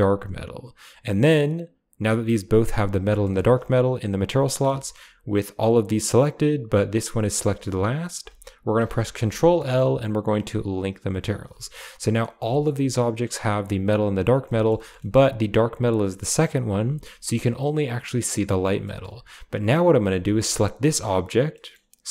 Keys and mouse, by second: 0.0-2.9 drag, 3.0 shift+middle click, 4.7 shift+middle drag, 8.9 ctrl+l, 11.6 shift+middle click, 12.2 middle click, 12.5 shift+click, 14.4 shift+middle drag, 15.0 shift+middle click, 18.8 shift+middle click, 20.2 shift+middle click, 21.5 middle click.